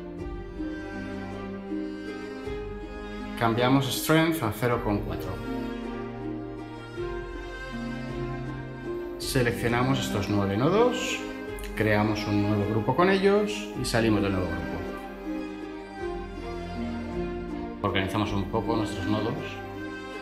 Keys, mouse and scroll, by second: 3.7 typing, 12.0 ctrl+g, 15.3 Tab.